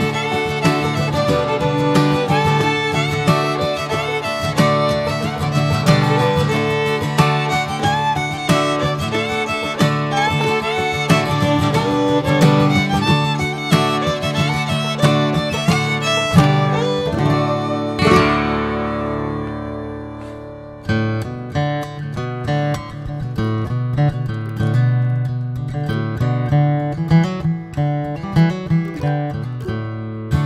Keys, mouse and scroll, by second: 0.8 click, 2.2 Tab, 2.4 click, 2.8-3.1 middle drag, 3.1 scroll down 4, 3.3-3.8 middle drag, 3.8 click, 4.1-6.6 middle drag, 6.6-7.0 scroll up 1, 7.0-8.1 middle drag, 8.1 click, 8.5 ctrl+a, 9.0 drag, 9.5 click, 10.2 click, 10.6-11.1 middle drag, 11.1 click, 11.5 shift+middle drag, 11.6 scroll up 1, 12.0-12.4 middle drag, 12.4 click, 13.3-14.4 shift+middle drag, 14.4 ctrl+1, 14.7 ctrl+2, 15.8 ctrl+3, 16.5 drag, 16.8 scroll down 3, 17.1-18.3 middle drag, 18.3 click, 18.8 ctrl+a, 19.3 click, 19.6-20.2 middle drag, 20.2-20.7 scroll up 2, 20.7-22.8 middle drag, 22.8-23.4 scroll down 1, 23.4-24.3 middle drag, 24.3 scroll up 1, 24.5-28.2 middle drag, 28.2 click, 28.3 click, 28.5 middle click, 28.6 scroll up 1, 28.9-29.5 shift+middle drag, 29.5 click, 29.7-30.4 middle drag.